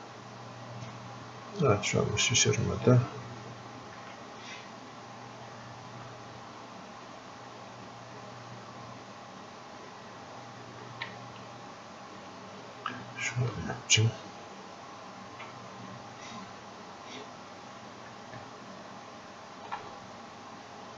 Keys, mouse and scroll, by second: 2.4-4.0 drag, 4.0 ctrl+z, 5.1 click, 11.2-13.5 shift+drag, 13.5-15.7 ctrl+drag, 15.7-18.3 ctrl+drag, 20.4 click.